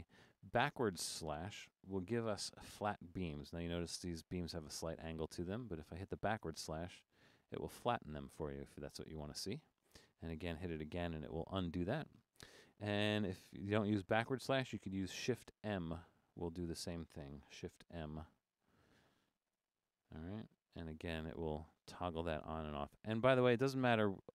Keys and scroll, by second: 0.1 Left, 6.2 \, 7.2 Right, 7.4 Right, 7.6 Right, 8.0 \, 8.2 Right, 8.4 Right, 8.6 Right, 9.0 \, 10.2 Left, 10.4 Left, 10.6 Left, 10.9 \, 11.1 Left, 11.2 Left, 11.7 Left, 11.9 \, 15.5 shift+m, 16.3 Right, 16.3 Right, 16.5 Right, 17.8 shift+m, 18.4 Right, 18.6 Right, 18.7 Right, 19.6 shift+m, 20.9 typing, 21.7 Left, 21.7 Left, 21.9 Left, 22.4 shift+m, 22.8 Left, 23.0 Left, 23.4 Right, 23.8 Left.